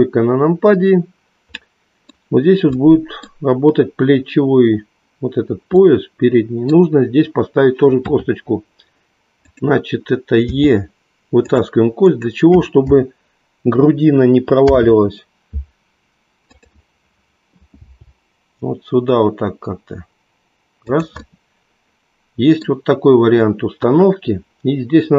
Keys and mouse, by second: 2.8 middle click, 5.8 middle click, 9.8 KP_3, 10.6 e, 11.4 click, 12.1 click, 15.2 alt+p, 17.8 g, 22.1 middle click, 23.7 KP_1.